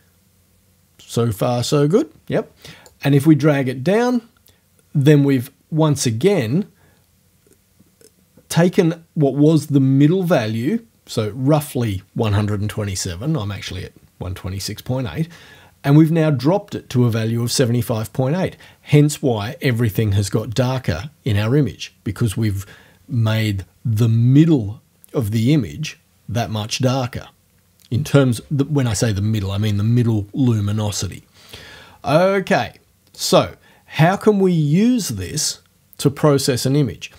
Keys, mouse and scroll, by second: 2.9-4.5 drag, 33.2 click.